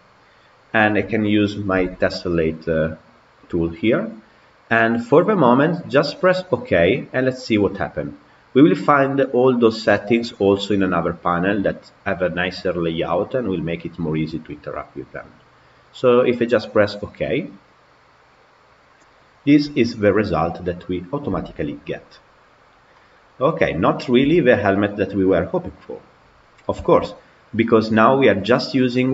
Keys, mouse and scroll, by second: 2.1-5.1 drag, 19.1-19.4 scroll down 3, 19.4-21.1 middle drag, 21.1 g, 24.0 KP_Decimal, 24.7-26.4 middle drag, 26.4 scroll up 1, 26.7-29.1 shift+middle drag.